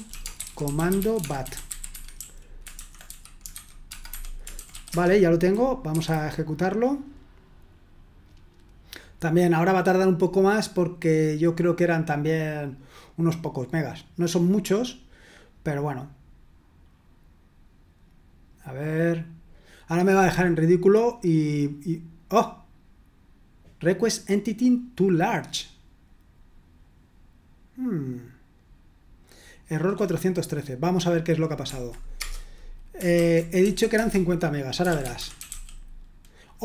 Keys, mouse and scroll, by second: 0.0-2.1 typing, 3.3-5.9 typing, 32.2 Return, 33.1-36.0 typing, 34.0 Return.